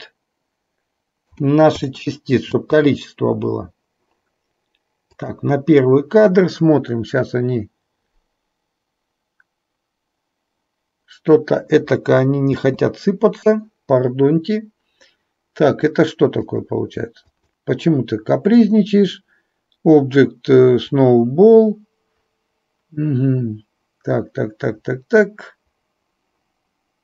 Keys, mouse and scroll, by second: 2.7 space, 5.3 click, 12.7 space, 17.4 click.